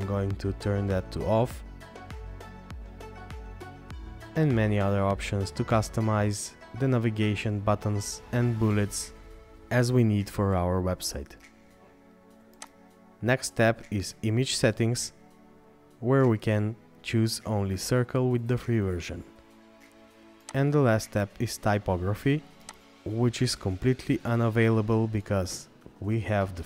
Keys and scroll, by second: 3.8-4.6 scroll down 1, 8.8 scroll up 1, 15.6-17.7 scroll down 1, 23.8-26.6 scroll down 1.